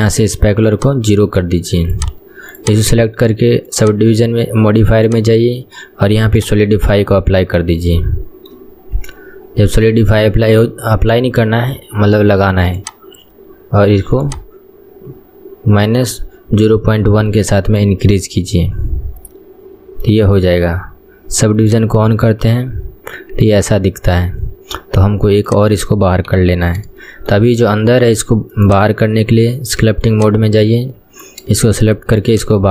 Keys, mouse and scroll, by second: 0.9-2.7 shift+drag, 6.5-7.2 drag, 7.2-7.9 scroll up 10, 8.1-9.1 shift+middle drag, 9.1-9.7 scroll down 7, 9.7-13.1 scroll up 7, 13.1-17.5 drag, 17.5-18.1 middle drag, 18.1-18.7 scroll up 4, 18.7-21.7 middle drag, 21.7 click, 22.5 scroll down 1, 22.7-25.6 middle drag, 25.6 click, 26.4 KP_1, 26.7-27.1 scroll down 7, 27.1-28.7 shift+middle drag, 28.7 click, 29.5 shift+middle click, 30.2-31.8 drag, 31.8 shift+middle click, 32.3-32.7 drag.